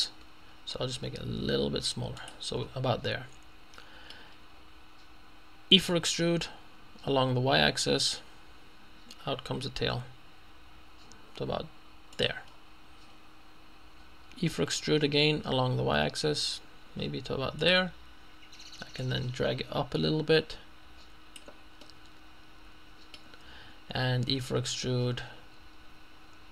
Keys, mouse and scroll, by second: 1.0 s, 2.2 click, 2.6-3.1 scroll down 1, 3.1 scroll up 2, 3.2-3.6 scroll down 2, 3.6 scroll up 2, 5.8 e, 7.7 y, 12.2 click, 12.6-13.2 scroll down 1, 14.6 e, 15.9 y, 17.8 click, 19.6-21.9 drag, 24.3 e.